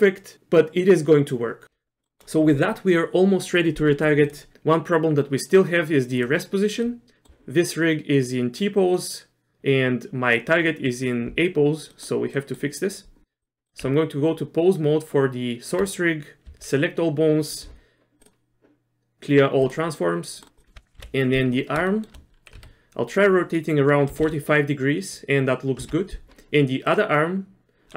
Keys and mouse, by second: 2.0 middle click, 4.3 click, 6.8 middle click, 12.0 middle click, 12.4 middle click, 13.6 middle click, 13.7 Tab, 13.8 Tab, 16.5 a, 18.2-19.7 drag, 20.3 middle click, 21.0 KP_1, 21.9 shift+middle click, 22.6 r.